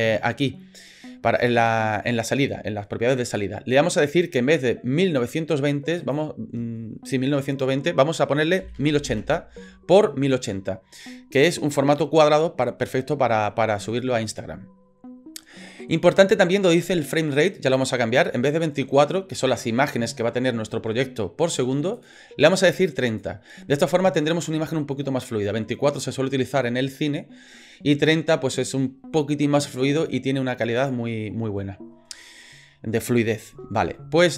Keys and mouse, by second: 6.0-10.0 drag, 22.1-23.2 drag.